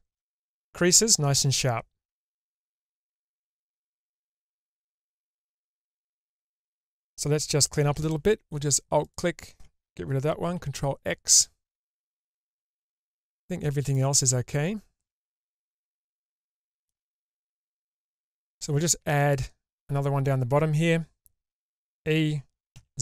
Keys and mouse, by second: 1.0-5.8 middle drag, 6.3 Tab, 7.9 2, 9.0 alt+click, 10.6 ctrl+x, 13.2 middle click, 14.6 shift+middle click, 15.6 middle click, 16.5 shift+middle click, 17.0 middle click, 18.0 shift+middle click, 19.2 alt+click, 21.8 e.